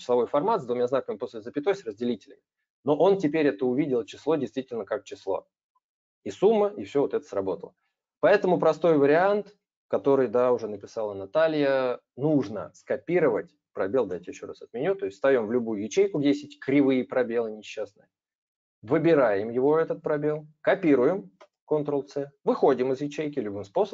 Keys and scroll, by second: 14.1 ctrl+z, 21.1 ctrl+c.